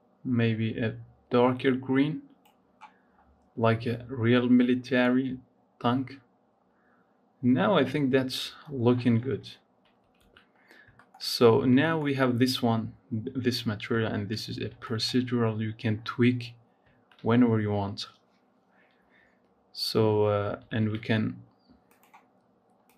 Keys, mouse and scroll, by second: 3.1-4.5 scroll down 4, 4.5-6.5 middle drag, 6.5-7.7 scroll down 3, 7.7-8.4 scroll up 3, 8.4-10.0 scroll down 20, 10.0 ctrl+s, 10.4-10.9 scroll up 4, 10.9 shift+middle click, 11.2-11.7 scroll down 3, 11.7 shift+middle click, 12.0-12.6 scroll up 3, 12.6-13.4 scroll down 3, 13.4-14.2 scroll up 3, 14.2-14.8 scroll down 3, 14.9-18.9 shift+middle drag, 18.9 scroll down 9, 20.6 ctrl+s, 21.7-22.9 drag.